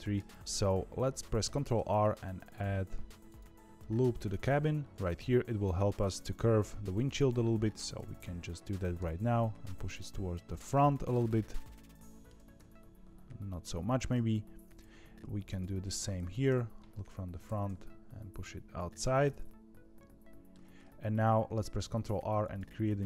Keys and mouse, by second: 0.1 KP_3, 1.4 ctrl+r, 8.7 g, 10.6-12.2 middle drag, 12.3 g, 16.4 KP_1, 17.4 g, 19.1-20.5 middle drag, 21.7 ctrl+r.